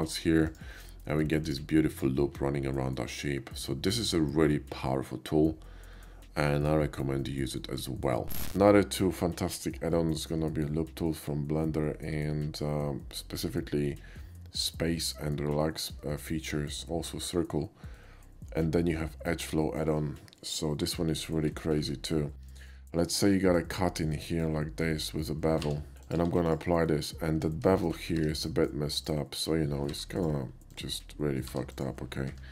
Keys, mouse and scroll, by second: 0.3 click, 1.3 alt+click, 1.9 alt+click, 3.6-6.7 alt+middle drag, 8.0 middle click, 10.0-10.3 shift+middle drag, 10.5 shift+middle click, 15.6 shift+middle drag, 17.9-19.3 shift+middle drag, 19.6 shift+middle click, 22.1 KP_5, 22.3 middle click, 22.6 middle click, 23.6 click, 24.1 middle click, 25.6 b, 26.0 click, 26.2 q, 26.5 click, 26.9 middle click, 27.5 KP_5, 27.7 middle click, 28.0 middle click, 28.2 Tab, 28.5 middle click, 29.0 click, 29.9 g, 30.2 click, 30.7 click, 31.8 click.